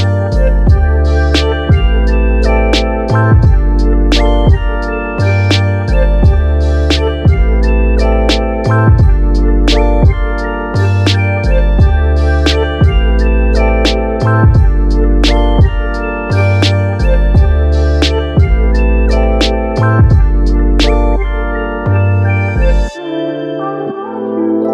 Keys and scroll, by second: 20.8 super+z, 21.1 super+z.